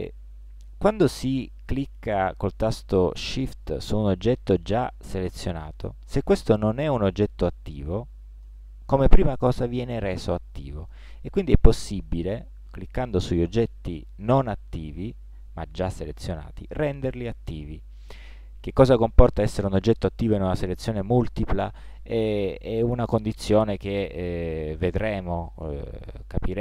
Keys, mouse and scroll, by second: 8.5 right click, 11.5-17.9 right drag.